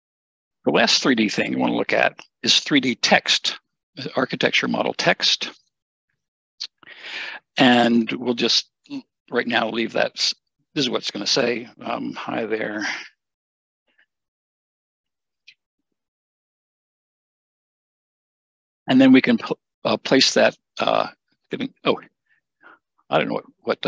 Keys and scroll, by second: 12.4-14.8 typing.